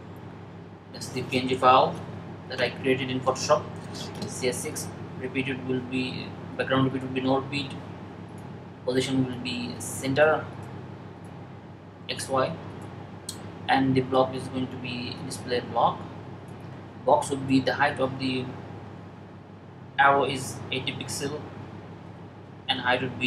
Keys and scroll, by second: 19.9-20.8 typing.